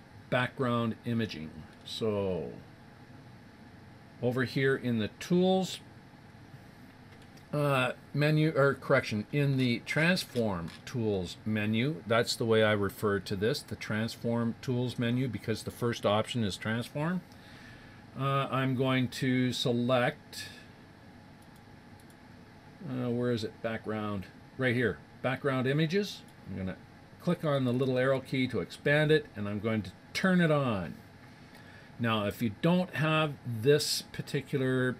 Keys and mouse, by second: 6.4-12.7 middle drag, 17.3-20.0 middle drag, 21.4-23.7 drag, 23.7-25.1 middle drag, 26.1-30.1 drag, 30.1-32.1 drag.